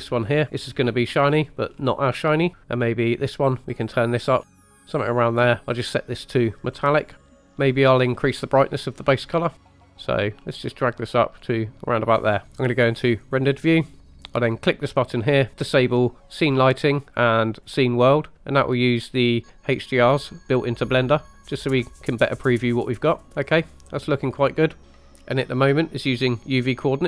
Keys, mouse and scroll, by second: 0.6 click, 3.0 click, 3.7 click, 4.4 click, 6.1 click, 7.2 middle click, 9.4-9.7 drag, 12.4 click, 13.2 click, 14.4-18.3 drag, 19.9-20.9 drag, 21.3 scroll up 3, 22.1-23.5 middle drag, 23.9-25.1 middle drag, 24.8 scroll down 2.